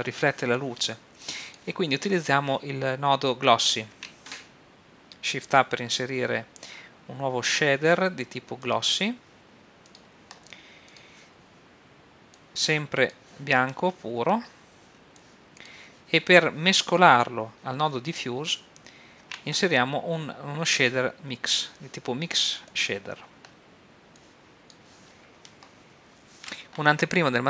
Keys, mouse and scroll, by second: 1.2-3.9 drag, 3.9 shift+a, 10.0-12.7 drag, 15.1-16.9 drag, 19.2 shift+a, 22.8-25.9 drag.